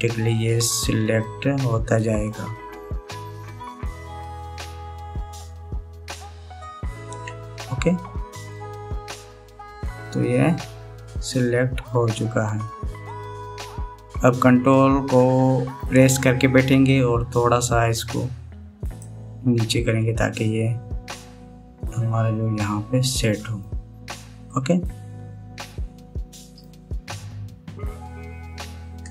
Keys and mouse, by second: 0.0 ctrl+KP_Add, 0.4 ctrl+KP_Add, 0.8 ctrl+KP_Add, 1.5 ctrl+KP_Add, 2.1 ctrl+KP_Add, 2.5 ctrl+KP_Add, 2.8 ctrl+KP_Add, 3.3 ctrl+KP_Add, 3.6 ctrl+KP_Add, 3.9 ctrl+KP_Add, 4.2 ctrl+KP_Add, 5.0 ctrl+KP_Add, 5.2 ctrl+KP_Add, 6.3 ctrl+KP_Add, 7.4 ctrl+KP_Add, 9.1-12.5 middle drag, 13.4-16.5 middle drag, 17.5-19.7 ctrl+drag, 19.7 ctrl+middle click, 21.1-24.4 middle drag, 25.2-27.2 middle drag.